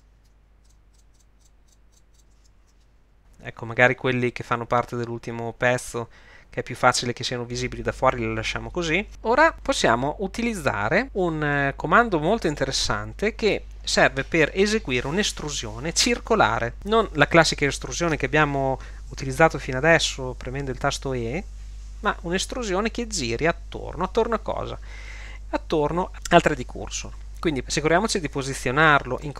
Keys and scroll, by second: 2.6 ctrl+shift+x, 12.5 Tab.